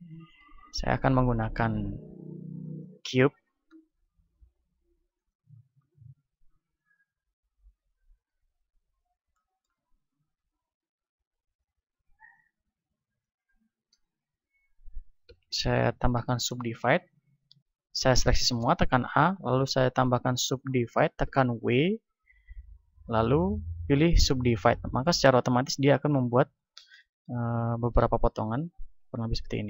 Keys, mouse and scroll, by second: 1.0 shift+a, 3.4-5.2 middle drag, 4.3 s, 5.2-9.2 drag, 8.2 z, 9.2-11.8 middle drag, 10.4 s, 11.8-14.8 drag, 13.8 Tab, 15.0 w, 15.4-17.2 drag, 17.2 a, 18.0 a, 21.2 w, 25.2 z, 25.6-29.6 middle drag.